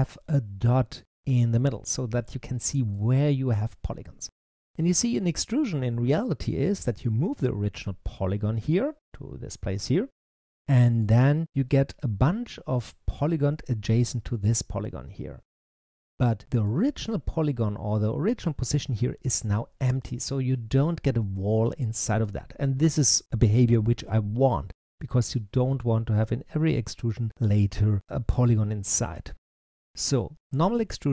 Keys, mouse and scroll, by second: 1.5-7.3 middle drag, 10.3-13.2 middle drag, 15.5-18.6 middle drag.